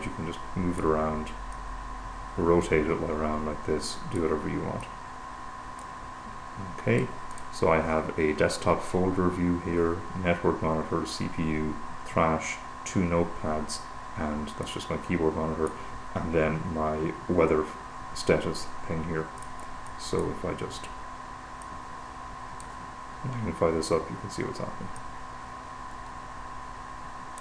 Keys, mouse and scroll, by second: 2.1-5.1 drag, 5.3-8.4 drag, 15.1-16.6 drag, 19.9 click, 22.1-23.6 drag, 25.4-27.4 drag.